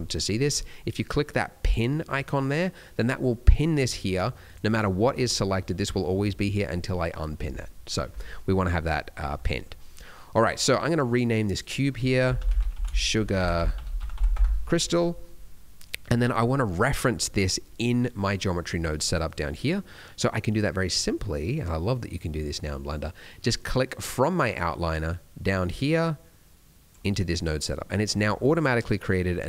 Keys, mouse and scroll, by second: 1.6 click, 3.5 click, 4.0 click, 4.4 click, 5.2 click, 8.2-8.8 scroll up 3, 8.8-9.3 scroll down 2, 9.3 middle click, 11.4 click, 11.6 click, 15.6 middle click, 15.9-17.0 scroll down 2, 17.0-17.7 scroll up 3, 18.2 middle click, 18.4-19.1 scroll down 3, 19.2 click, 23.5 click, 28.0-28.7 scroll up 4, 28.4 middle click.